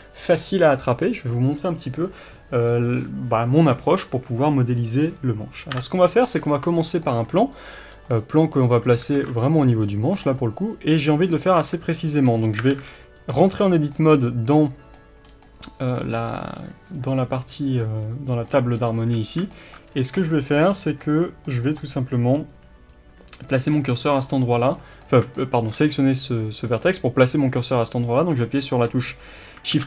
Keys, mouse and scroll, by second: 5.7 KP_7, 6.4-6.7 scroll up 1, 8.1 click, 9.1 alt+a, 10.3 click, 11.6 Tab, 11.6-13.9 right drag, 11.9 scroll up 1, 12.7 alt+a, 13.4 scroll down 1, 13.9-23.5 middle drag, 15.2 scroll down 1, 18.5 scroll up 1, 19.8-20.2 scroll up 1, 23.5 click, 23.7 scroll down 1, 23.9-29.8 middle drag, 27.8-29.8 scroll up 1.